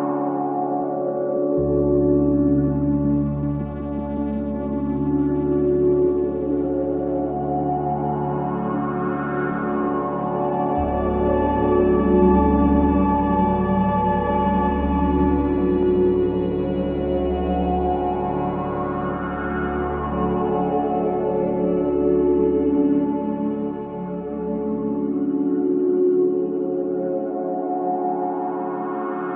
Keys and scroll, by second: 0.8 F4, 7.4 space, 7.8 Escape, 11.7 F4, 12.2 Escape, 16.2 shift+Page_Up, 18.4 shift+Home, 22.0 Escape, 24.1 c.